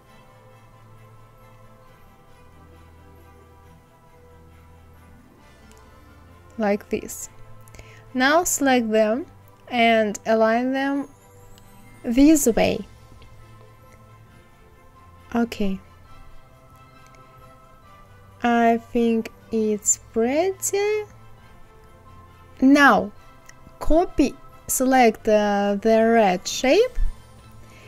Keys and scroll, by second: 16.3 Left, 18.2 Left, 18.8 Right, 27.7 ctrl+c.